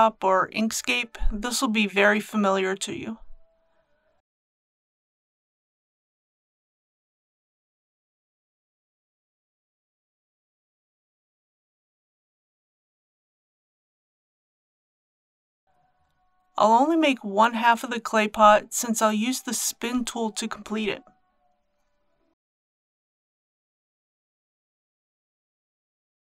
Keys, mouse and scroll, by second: 2.2-19.9 drag.